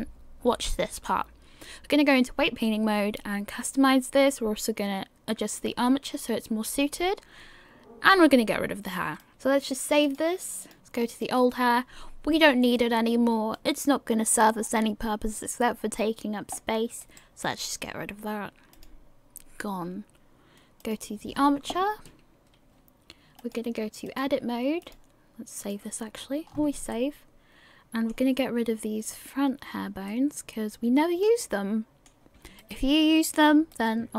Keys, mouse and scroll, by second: 9.2 click, 9.3-10.0 scroll up 8, 10.0 click, 11.2 click, 14.6 scroll down 6, 17.0 right click, 20.8 click, 23.4 click, 26.4 scroll up 5, 26.9 middle click, 29.4 right click, 29.8 scroll down 2, 30.1 middle click, 32.8 shift+right click.